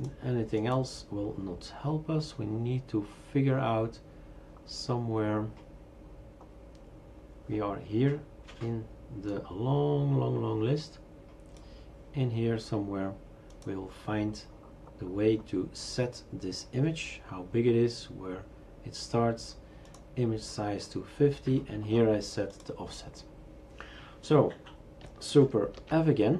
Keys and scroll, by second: 25.8 super+f.